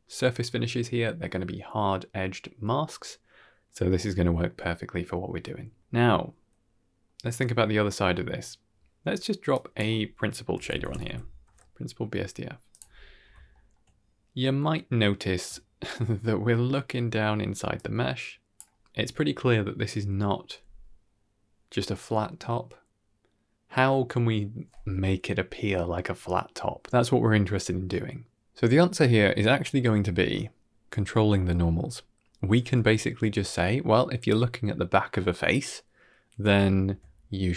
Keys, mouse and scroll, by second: 5.2-5.6 scroll down 2, 5.3 middle drag, 5.8-6.4 scroll up 1, 6.4-6.9 middle drag, 6.4-6.8 scroll up 1, 9.4-12.6 drag, 13.0 scroll up 2, 13.4 shift+middle click, 13.8-15.3 middle drag, 15.5 shift+middle drag, 15.9 scroll down 1, 16.5 middle click, 17.6-18.4 drag, 17.6 scroll up 2, 18.7 scroll down 2, 18.9-20.3 middle drag, 29.5-30.6 middle drag, 32.1-32.6 scroll down 2, 32.7 shift+middle click, 35.9 middle click, 36.6 shift+middle click.